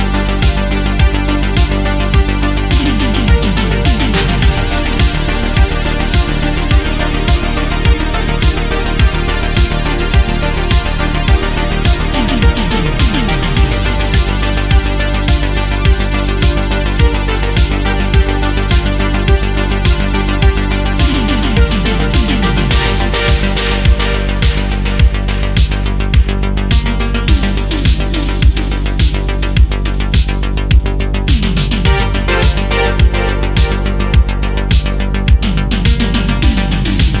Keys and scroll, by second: 3.0 space, 16.3 space, 19.1 ctrl+z, 21.6 ctrl+z, 23.2 ctrl+z, 30.9 ctrl+z, 31.3 ctrl+z, 32.0 ctrl+z, 32.6 ctrl+z, 33.2 ctrl+z, 33.5 ctrl+z, 34.1 ctrl+z.